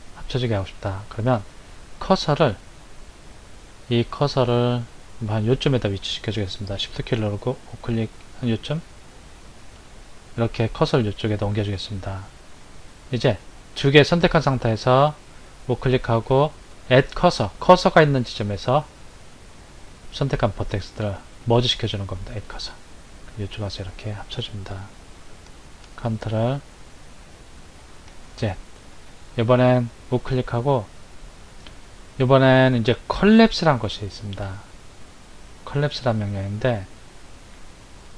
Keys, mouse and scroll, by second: 9.3 shift+right click, 14.8 right click, 27.7 ctrl+z, 29.0 right click.